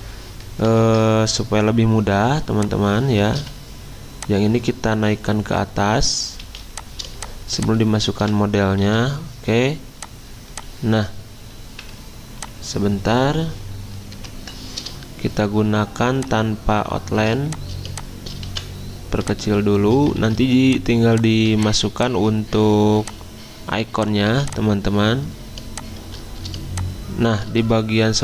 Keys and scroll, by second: 0.8 ctrl+z, 2.3 y, 3.4 v, 6.3 z, 8.2-9.3 typing, 14.1 v, 20.4 ctrl+z, 24.3 z, 25.6 v.